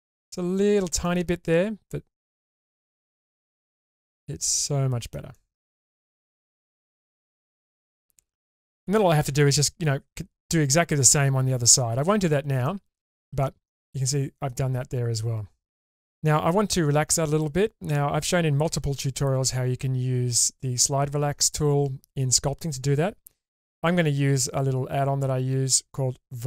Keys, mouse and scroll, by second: 0.7-1.0 scroll up 2, 1.0-2.4 middle drag, 2.7-3.7 scroll down 6, 3.7-5.1 middle drag, 5.3-5.7 shift+middle drag, 6.0 Tab, 6.7-7.6 scroll up 1, 7.6 click, 7.6 scroll up 1, 8.3 scroll up 2, 8.6 shift+middle click, 12.7 middle click, 13.4 shift+middle click, 15.2 scroll down 3, 15.8 ctrl+s, 24.9-26.4 scroll down 5.